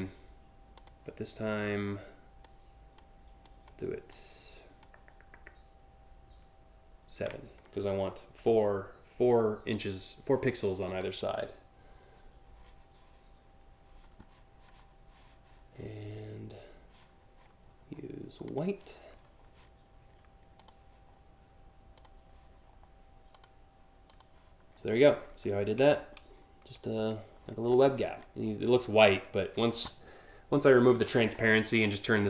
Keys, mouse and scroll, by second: 0.4 click, 2.0 click, 3.1 click, 3.7 click, 18.1 click, 20.2 click, 21.6 click, 23.0 click, 23.7 click, 24.4 scroll up 3, 25.5-26.2 alt+scroll up 5, 27.3-27.7 scroll up 2, 31.0-31.6 alt+scroll down 4, 32.0 alt+scroll up 1.